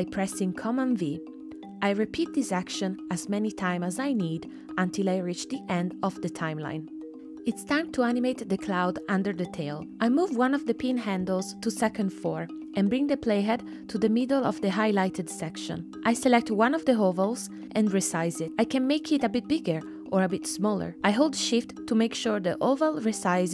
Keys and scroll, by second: 4.4 super+c, 4.7 super+v, 6.8 super+v.